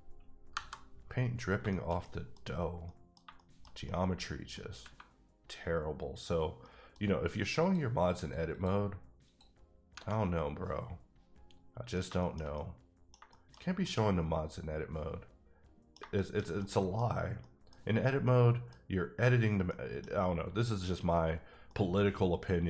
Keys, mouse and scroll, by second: 0.5 KP_Divide, 1.7 shift+middle click, 2.4 scroll up 3, 2.8 middle click, 6.6 middle click, 7.6-9.6 drag, 10.1-11.7 middle drag, 11.9 scroll down 2, 12.8 middle click, 14.1-16.0 middle drag, 16.6 middle click, 17.4 middle click, 18.0 middle click, 19.2-19.6 scroll up 1, 19.6 middle click, 21.8 middle click.